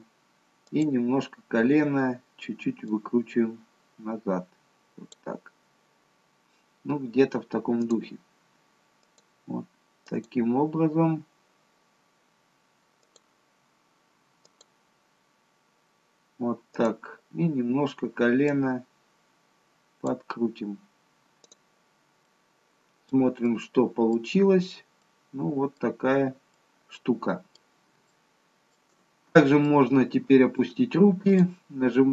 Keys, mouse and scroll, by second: 0.6 click, 3.3 click, 6.1-7.8 scroll up 2, 7.8 click, 9.0 click, 13.0 click, 14.4 click, 18.7 click, 21.5 click, 22.2 middle click, 23.5 middle click, 24.4-25.0 scroll down 2, 25.0 middle click, 26.0-26.4 scroll down 1, 26.8 middle click, 28.1 shift+middle click, 29.6 middle click, 31.3 click.